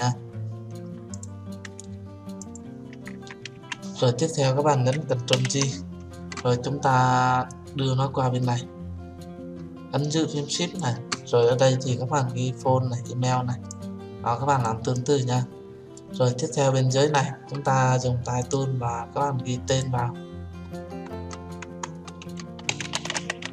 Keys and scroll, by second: 5.3 ctrl+j.